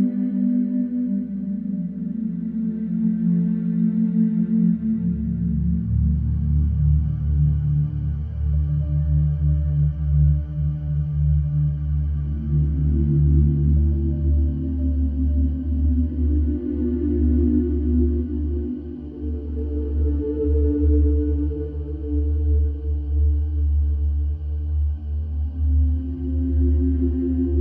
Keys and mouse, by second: 0.3 n, 1.2 KP_0, 9.5 n, 10.7 i, 20.2 i, 22.6 space, 25.8 space, 27.3 Left.